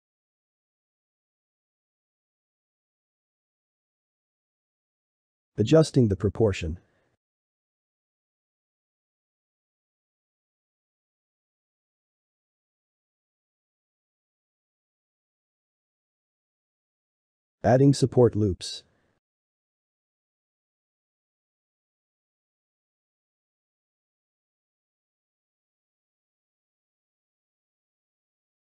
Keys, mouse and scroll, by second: 0.7 i, 1.7 shift+b, 2.1-3.5 middle drag, 4.6 shift+middle click, 4.9 Tab, 5.3 alt+z, 5.5 click, 5.9 shift+middle click, 6.3 shift+g, 7.5 g, 9.1 shift+middle click, 9.4 click, 10.1 g, 11.5 alt+z, 11.9-15.5 middle drag, 15.9 shift+middle click, 16.8 ctrl+r, 17.5 ctrl+r, 18.5 shift+click, 18.7 shift+click, 19.1-20.1 middle drag, 20.1 g, 22.1-23.7 shift+middle drag, 23.7 ctrl+r, 26.0 ctrl+r, 28.3 shift+middle click.